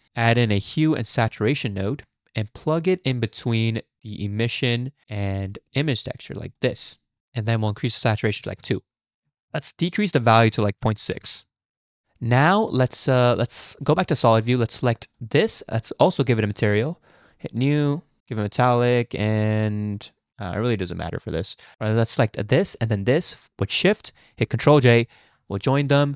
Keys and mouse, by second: 7.7 click, 10.1-11.2 drag, 12.3 drag, 13.9 z, 17.3-18.4 drag, 18.9 click, 19.9 click, 21.7-22.4 middle drag, 22.9 shift+click, 24.8 ctrl+j, 25.9 drag.